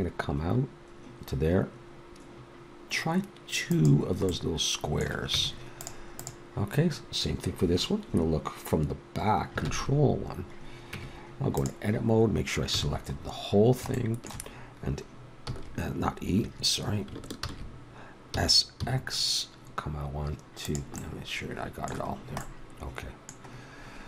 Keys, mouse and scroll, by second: 4.2-5.3 middle drag, 5.3 Tab, 9.6 ctrl+KP_1, 10.9 Tab, 12.7 a, 14.5 middle click, 15.4 e, 15.8 middle click, 17.4 ctrl+z, 18.3 s.